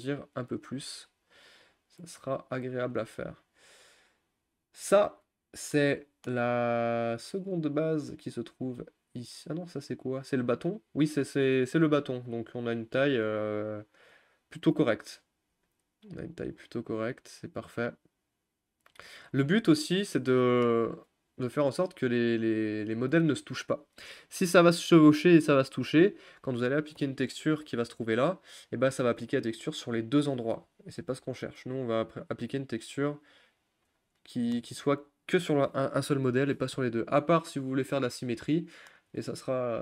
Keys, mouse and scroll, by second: 0.8 g, 3.4 click, 5.7-12.5 shift+middle drag, 12.5-12.9 scroll down 1, 12.9-15.6 middle drag, 15.6 g, 21.5 r, 23.0 g, 30.9 ctrl+z, 32.0 g.